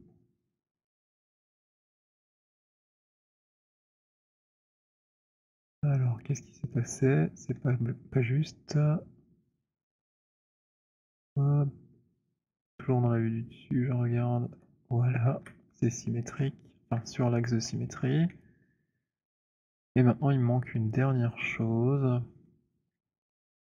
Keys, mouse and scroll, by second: 1.3-5.1 c, 3.2 c, 5.3 middle click, 5.3 c, 5.4 c, 6.9 middle click, 7.6-15.4 typing, 14.4 middle click, 16.3 middle click, 17.0 scroll, 17.4 alt+click, 17.9-19.3 scroll, 19.7 scroll, 20.7 scroll, 22.4 middle click, 23.0 alt+click.